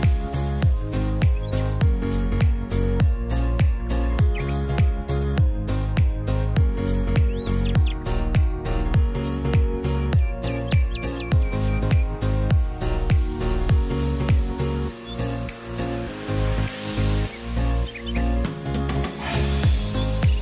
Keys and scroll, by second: 3.6 r, 6.1 e, 19.9 1, 20.0 Tab, 20.1 1, 20.3 Return.